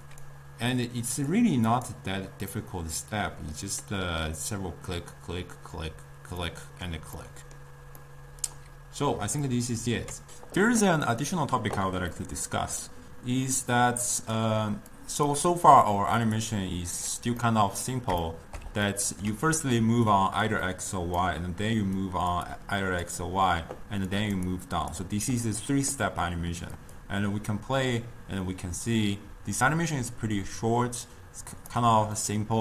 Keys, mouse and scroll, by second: 0.3 click, 1.4 click, 2.0 click, 2.6-10.3 middle drag, 12.2-13.8 middle drag, 13.8 click, 15.0 click, 16.4-17.5 drag, 17.5-19.8 middle drag, 19.8-25.9 typing, 20.2 click, 20.9 click, 22.1 click, 22.7 click, 24.2 click, 24.6-25.0 drag, 26.9-30.0 drag, 31.7 click, 32.2-32.6 middle drag.